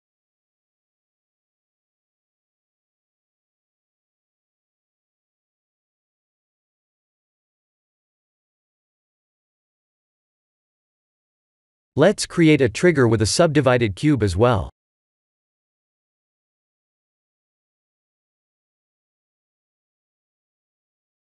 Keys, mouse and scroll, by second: 0.2 click, 0.8 KP_1, 1.4 shift+z, 2.0 Tab, 3.2 click, 3.4 b, 5.2 click, 5.7 b, 6.9 g, 9.6 click, 10.0 b, 10.8 g, 12.5 Tab, 14.7 click, 16.0 click, 17.3 shift+a, 20.3 s.